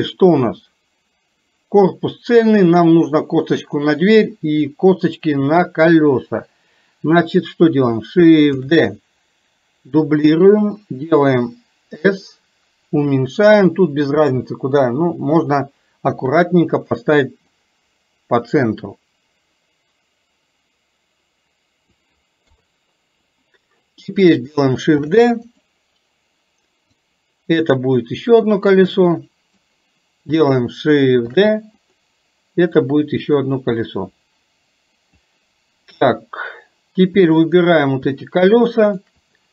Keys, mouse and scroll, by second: 8.6 shift+d, 12.1 s, 14.4 g, 16.4 KP_1, 17.6-22.1 drag, 22.5 KP_3, 25.1 shift+d, 27.1-29.6 drag, 31.4 shift+d, 32.8-35.2 drag, 37.6 shift+click, 38.9 shift+click.